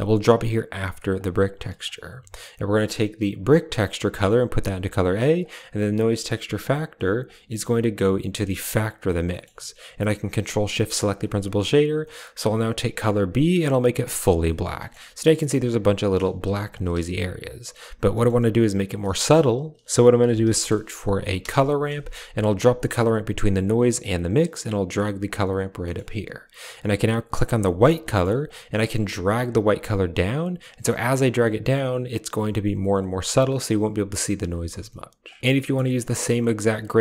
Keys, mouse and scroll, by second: 1.1 click, 5.3 click, 7.2-9.0 drag, 9.2 middle click, 10.9 ctrl+shift+click, 12.5 click, 14.8 shift+middle click, 16.1 click, 16.4 g, 16.8 a, 17.1 click, 18.0 click, 19.1 shift+a, 24.3 click, 27.2 click, 28.0 middle click, 28.3 click, 35.4 ctrl+v, 35.5 middle click, 35.9 middle click, 36.5 click.